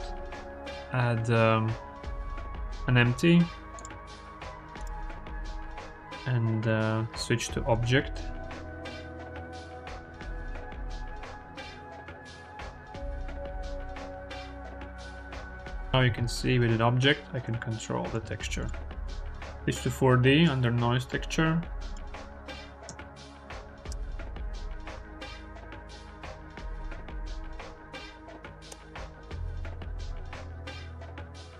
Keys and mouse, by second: 7.6-9.2 drag, 10.7 click, 13.0 r, 13.8 ctrl+z, 14.7 click, 15.6 click, 15.9 ctrl+z, 15.9 g, 18.2 ctrl+z, 21.8-23.6 drag, 24.6-26.2 drag, 27.5-28.6 drag, 30.7 click.